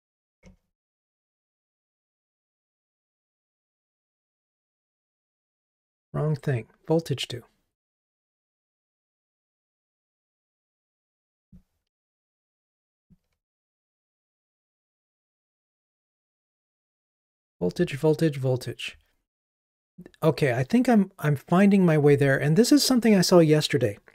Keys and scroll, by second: 10.4 super+c, 12.0 super+v, 16.3 Escape.